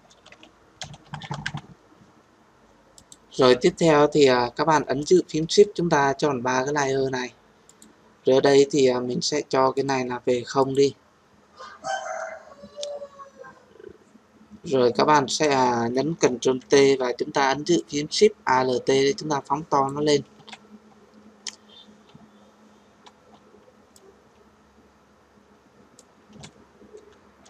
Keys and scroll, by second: 16.5 ctrl+t.